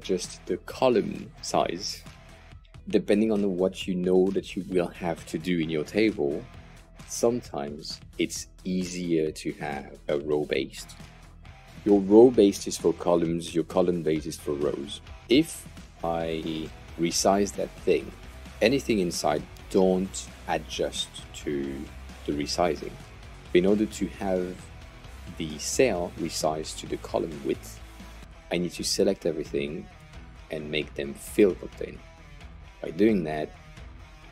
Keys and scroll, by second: 28.2 Return.